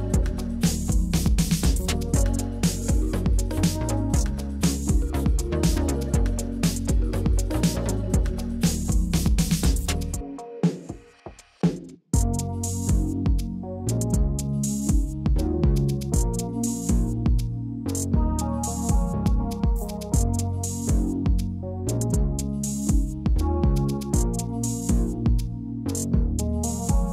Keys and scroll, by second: 0.7 4, 1.2 shift+;, 1.5 0, 5.1 8, 8.5 shift+Right, 8.6 shift+Right, 8.7 shift+Right, 10.7 ctrl+c, 14.2-16.8 typing, 18.1 ctrl+v, 20.1 Down.